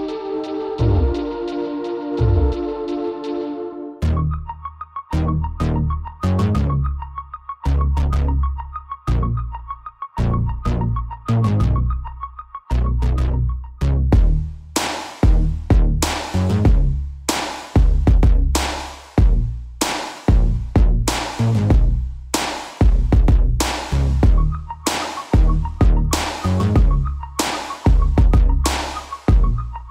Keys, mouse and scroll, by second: 2.6-4.3 middle drag, 5.7 KP_3, 8.5 click, 10.4 a, 11.6 b, 14.1-16.0 middle drag, 16.8 KP_3, 17.9-19.8 middle drag, 20.6 e, 22.8-24.8 right drag, 24.3 alt+s, 26.2 click, 28.0 middle click, 28.4 Tab, 28.8 middle drag, 28.9-29.9 middle drag.